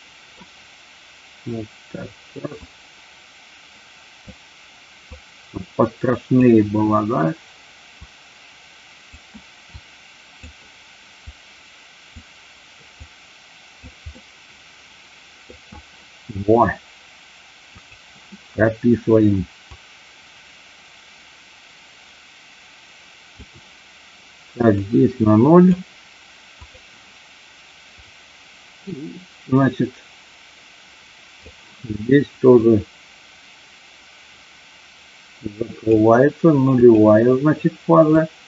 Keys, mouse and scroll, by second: 2.5-4.3 drag, 5.0-6.4 drag, 7.9-9.1 drag, 9.7 click, 11.2 click, 13.0 click, 14.1-15.4 middle drag, 17.7 click, 19.8-23.4 drag, 24.9 click, 27.9-31.5 drag, 32.6-35.9 drag, 36.8 click, 38.1-38.4 drag.